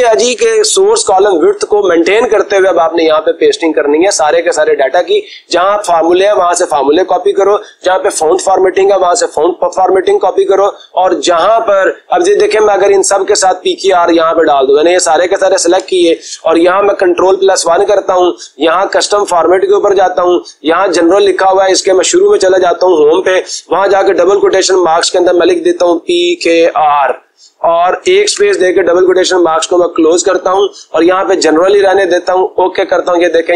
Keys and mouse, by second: 15.3 click, 17.3 ctrl+1, 19.6-20.6 drag, 21.1-22.1 drag, 22.9 Home, 25.2 p, 25.9 k, 27.3 r, 28.0 space, 28.5 ", 32.0-33.1 drag.